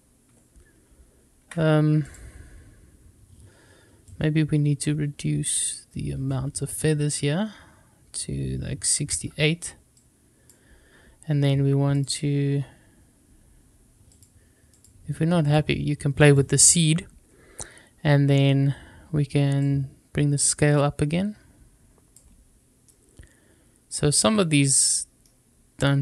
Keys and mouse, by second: 4.0-8.9 drag, 10.0-11.9 drag, 14.1 click, 15.4 click, 16.3 click, 19.5-22.1 drag, 22.8-24.1 middle drag, 24.6-26.0 middle drag.